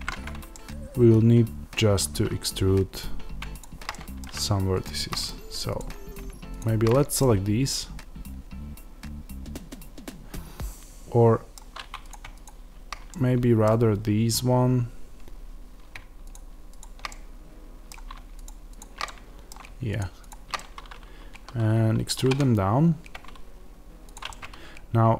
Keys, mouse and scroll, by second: 0.5-3.5 middle drag, 3.5 shift+click, 3.8 middle click, 4.7 shift+click, 5.1 middle click, 5.7 click, 7.1-12.0 middle drag, 12.0 click, 13.0-16.2 middle drag, 16.2 shift+click, 17.0-18.3 middle drag, 18.3 shift+click, 18.9 middle click, 19.9 shift+click, 20.4-25.1 middle drag, 22.1 e.